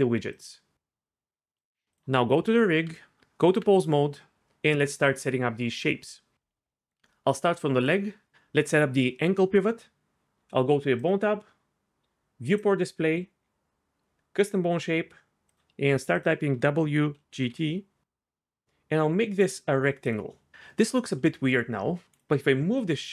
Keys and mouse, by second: 0.3 click, 1.9 click, 2.4-2.8 middle drag, 2.8 Tab, 7.9-8.3 drag, 11.0 click, 12.5 click, 16.3-20.1 drag, 21.4 KP_3.